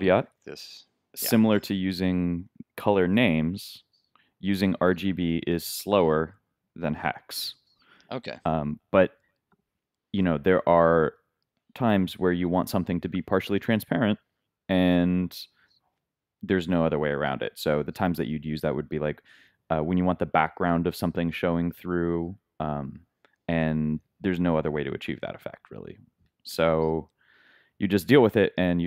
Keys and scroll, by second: 0.3 super+2, 0.4 super+s, 2.4 super+r, 5.5 super+Tab, 6.7 super+z, 7.6 super+s.